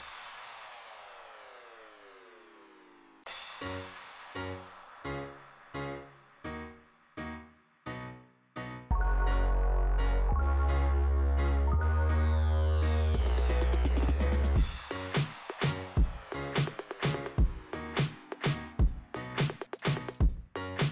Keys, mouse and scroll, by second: 0.4 click, 1.1 click, 3.2 click, 3.2 ,, 4.4 click, 7.2 click, 7.3 click, 8.9 click, 11.5 click, 11.7 click, 12.4 click, 14.3 click, 15.5 scroll down 1, 16.8 click, 18.5 click, 19.3-19.7 scroll up 1.